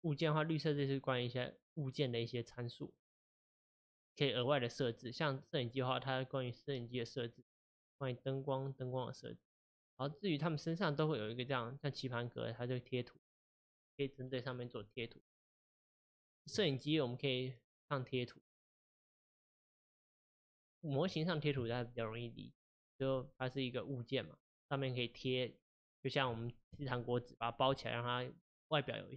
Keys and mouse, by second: 0.7 click, 5.4 click, 7.8 click, 10.1 drag, 11.1 click, 16.0 click, 19.3 click, 20.6 click, 23.3-26.4 middle drag.